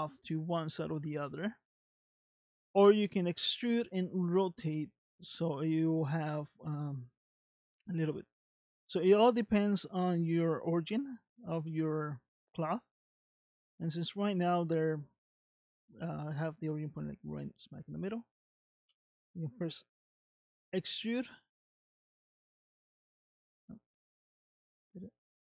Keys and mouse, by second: 18.9 r, 24.4 middle click.